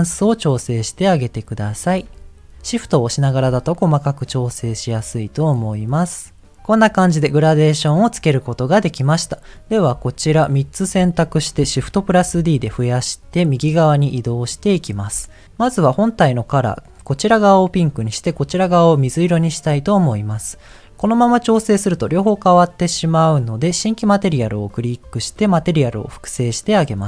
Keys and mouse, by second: 3.5-6.5 drag, 9.5 click, 10.1 click, 11.9 shift+d, 11.9 t, 15.5 click, 21.5-22.9 drag, 24.1 click.